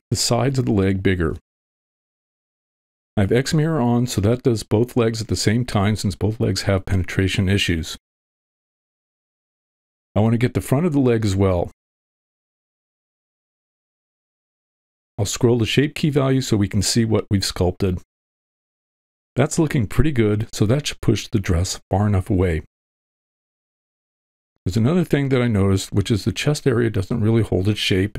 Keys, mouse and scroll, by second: 0.0 middle click, 1.2 shift+middle click, 1.9 middle click, 2.8 middle click, 3.9 shift+middle click, 4.2 click, 4.8 middle click, 5.7 click, 7.5 middle click, 9.7 KP_1, 10.8 middle click, 13.5-14.8 drag, 15.3 middle click, 15.9-17.2 drag, 17.9-19.3 middle drag, 19.9 ctrl+middle click, 21.5 click, 22.1 ctrl+middle click, 22.5 shift+middle click, 22.8 middle click, 25.0 click.